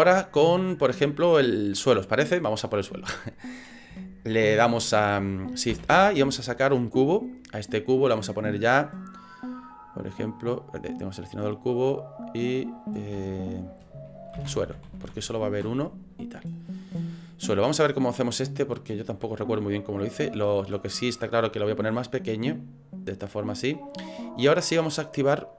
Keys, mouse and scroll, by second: 0.0 shift+middle click, 5.9 shift+a, 8.0 click, 8.3 click, 10.6 right click, 10.9 right click, 12.4 click, 12.6 click, 18.6 click, 20.3 click, 21.9 click, 24.5 click.